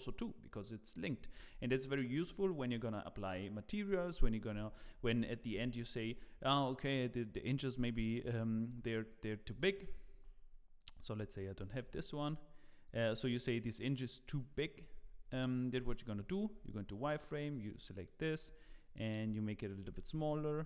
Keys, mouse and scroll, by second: 1.4-1.8 scroll up 4, 1.8 shift+middle click, 5.5 ctrl+z, 6.3 scroll down 2, 8.7 z, 9.1 click, 9.5 z, 10.1 Tab, 10.8 click, 11.8 x, 12.8 click, 13.3 click, 14.5 z, 15.0 scroll up 3, 15.3 shift+middle click, 15.7 Tab, 16.5 z, 17.0 click, 17.6 scroll down 1, 17.8 shift+middle click, 18.4-18.7 scroll down 3, 18.7 shift+middle click, 19.8 g.